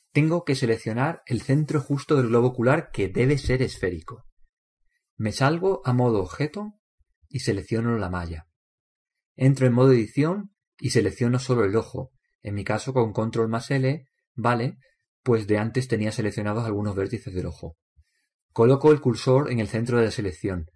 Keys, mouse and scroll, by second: 0.7-3.5 middle drag, 7.8 click, 9.3-11.2 right drag, 10.6 Tab, 11.4-14.1 middle drag, 15.5 ctrl+l.